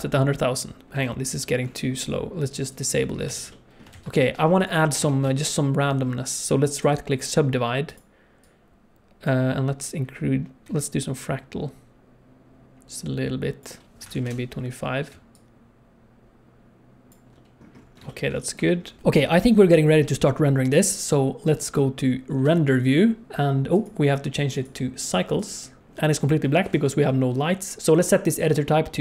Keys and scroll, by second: 0.8 z, 3.3 alt+a, 3.9 ctrl+s, 5.0 Tab, 7.9 Tab, 18.5 Tab, 19.0 ctrl+s, 21.8 z, 26.6 shift+F3, 27.8 shift+F3.